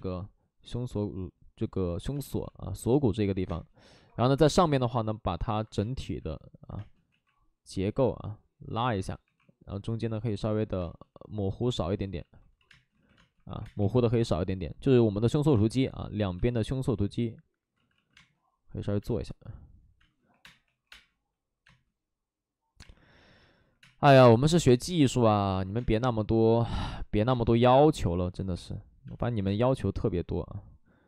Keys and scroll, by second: 2.4 ctrl+z, 3.4 space, 3.9 1, 4.4 space, 4.4 1, 5.9 ctrl+z, 6.7 space, 7.1 ctrl+z, 9.2 2, 10.8 space, 12.1 ctrl+z, 12.6-13.7 typing, 13.1 ctrl+z, 15.5 space, 17.7 ctrl+z, 18.1 ctrl+z, 18.1 space, 20.2 3, 20.3 space, 20.6 3, 20.8 space, 23.7 5, 23.7 space, 25.6 ctrl+z, 25.7 space, 27.1 ctrl+z, 27.2 space, 28.2 ctrl+z, 29.0 space, 29.3 1, 29.4 space.